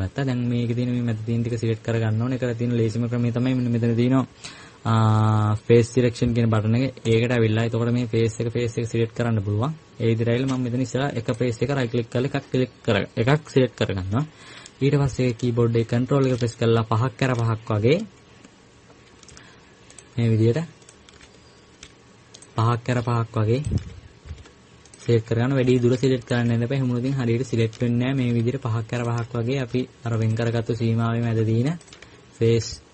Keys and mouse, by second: 15.8-17.1 middle drag, 21.4 right click, 22.1 click, 22.6-26.3 middle drag, 28.5 click, 28.5 right click, 28.9 click, 28.9 right click, 31.6 middle click, 32.3-32.9 middle drag.